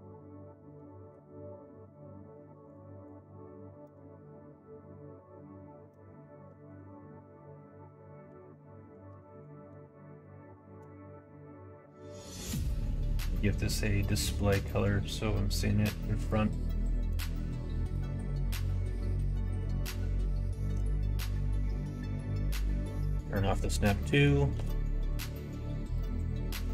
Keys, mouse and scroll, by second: 14.5 click, 16.2 click, 18.6 middle click, 19.1 middle click, 19.4 middle click, 19.9 middle click, 20.8 click, 21.3 middle click, 21.6 middle click, 22.3 shift+Tab, 22.6 middle click, 23.2 middle click, 23.6 click, 24.0 click, 24.5 shift+d, 26.1 click.